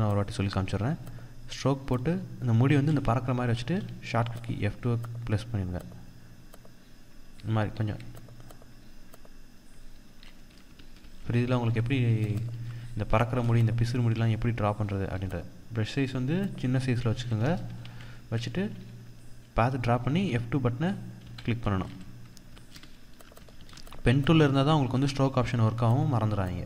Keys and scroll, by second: 3.2 F2, 7.7 F2, 10.2 ctrl+-, 10.8 ctrl+0, 11.5 ctrl+=, 12.2 ctrl+space, 12.9 ctrl+space, 14.4 F2, 16.2 F2, 17.3 ctrl+z, 20.1 ctrl+z, 22.1 Escape, 23.0 ctrl+=, 23.1 ctrl+space, 23.8 ctrl+space, 26.1 F2.